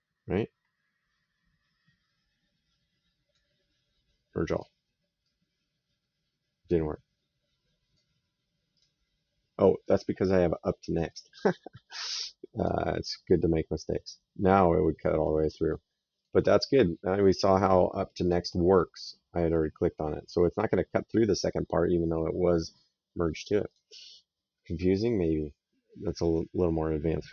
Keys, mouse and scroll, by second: 4.4 click, 5.1 right click, 8.6 click, 10.9 click, 12.4 click, 14.0 right click, 16.0 click, 18.1 click, 19.3 right click, 23.6 click, 24.8 right click, 27.2 middle click.